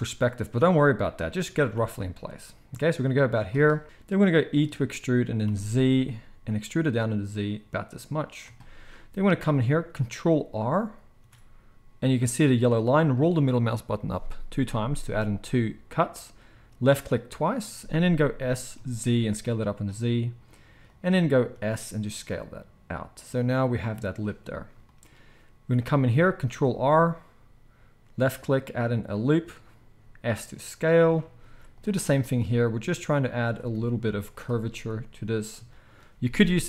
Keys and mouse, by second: 1.3 g, 4.5 e, 11.1 ctrl+r, 18.3 s, 26.4 ctrl+r, 29.8 s, 31.3 ctrl+r, 32.2 s, 33.8 ctrl+r, 34.7 s.